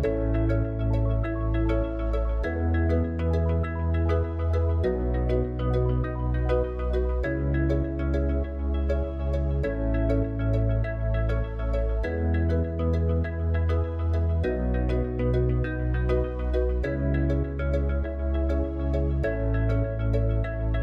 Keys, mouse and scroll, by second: 3.4 KP_1, 4.7 KP_3, 7.4-12.6 drag, 12.6-14.9 middle drag, 14.9 click.